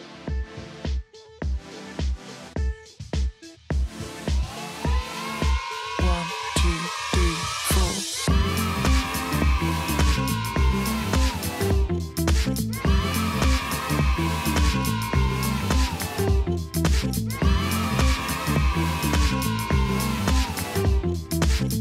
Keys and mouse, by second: 0.9 click, 2.8 v, 3.9 click, 6.1 click, 7.5 click, 8.6 click, 10.4 click, 11.5 click, 12.8 click, 14.1 click, 15.1 click, 17.1 click, 18.6 click, 20.4 click.